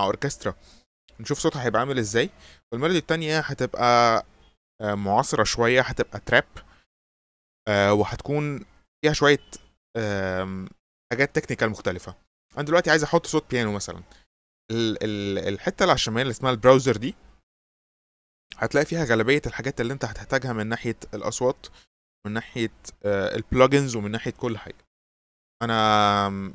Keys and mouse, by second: 8.8 click.